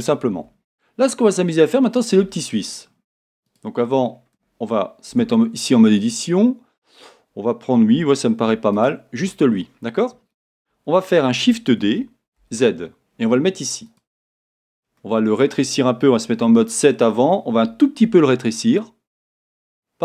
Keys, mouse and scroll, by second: 0.0-3.5 middle drag, 1.6-2.8 scroll up 2, 2.8-3.5 scroll up 1, 3.5 click, 4.0 scroll up 1, 5.2 Tab, 6.1-7.9 scroll up 1, 7.9 a, 8.7 alt+click, 9.5-11.9 scroll down 1, 11.9 shift+d, 14.0 click, 15.0-20.0 middle drag, 16.4 KP_7, 18.0 s.